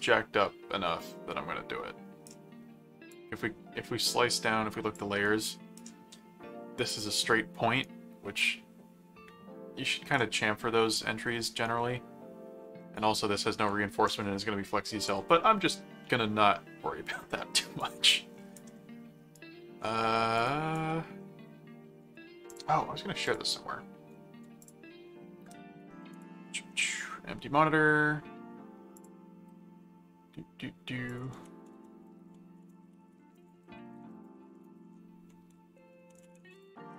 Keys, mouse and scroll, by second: 3.1-4.9 drag, 5.2 right click, 7.8-10.1 right drag, 11.6 right click, 18.1 right click, 18.7 middle click, 19.3-20.4 right drag, 20.8 right click, 20.9 middle click, 22.5 click, 23.2 click, 24.6 click, 28.9 click, 31.0 ctrl+click, 31.3 ctrl+v, 32.3-36.9 typing.